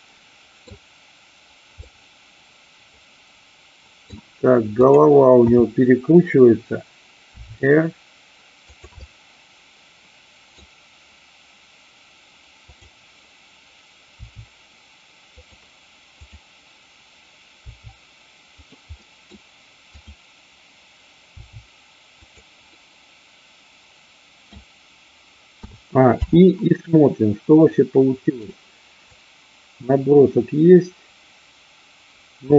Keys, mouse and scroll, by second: 1.8-4.0 middle drag, 5.8 KP_7, 7.4 r, 8.7 click, 8.9-10.5 middle drag, 12.7-13.7 drag, 14.1 r, 15.4 click, 16.3-17.1 drag, 17.7 r, 18.7 click, 19.0 middle click, 19.9-20.9 drag, 21.3 r, 22.3 click, 22.7-24.5 middle drag, 26.1 i, 27.8-28.4 middle drag, 29.1-32.5 drag.